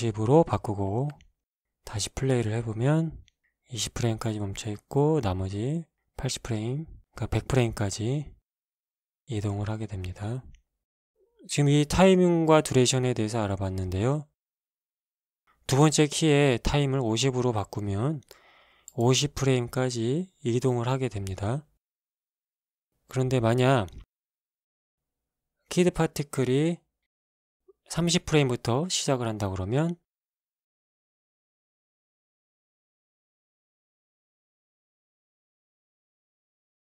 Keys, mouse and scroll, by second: 0.1 Return, 1.3 middle click, 3.4 alt+a, 11.5 Escape, 13.8 click, 15.5 click, 16.2 click, 17.0 KP_5, 17.2 KP_0, 17.7 Return, 19.3 alt+a, 23.1 Escape, 24.4-25.5 drag, 26.6 click, 29.0 KP_3, 29.2 KP_0, 29.7 Return, 30.7 click, 31.5 KP_3, 31.6 KP_0, 32.0 Return, 33.5 shift+Left, 34.0 alt+shift+a.